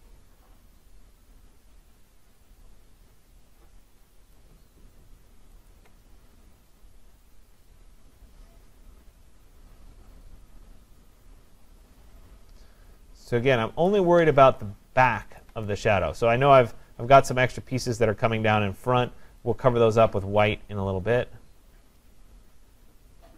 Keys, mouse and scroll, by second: 4.4 click, 5.7 alt+click, 13.9 click, 15.4 alt+click.